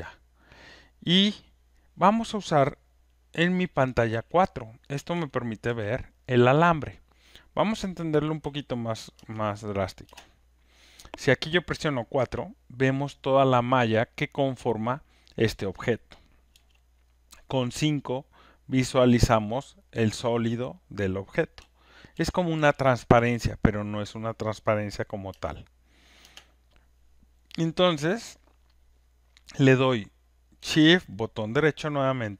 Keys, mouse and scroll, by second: 4.1 4, 5.1 5, 8.4 5, 9.4 space, 10.1 space, 12.2 4, 16.5 5, 21.4-23.1 typing, 26.3 click.